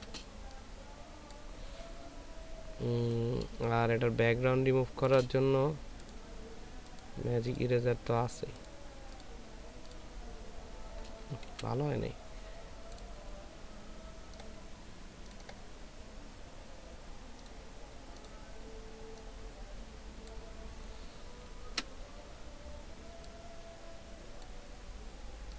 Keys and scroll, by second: 3.8 ctrl+space, 21.5 ctrl+l.